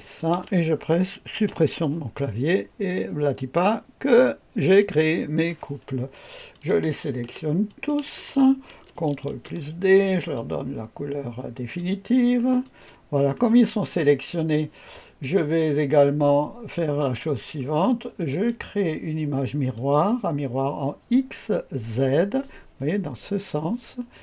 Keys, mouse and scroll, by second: 0.0 click, 1.3 Delete, 2.1-5.4 drag, 6.4 click, 7.6 shift+click, 9.1 ctrl+d, 10.0 click, 11.6 click, 12.6 click, 15.1 click, 18.2 click, 19.6 click.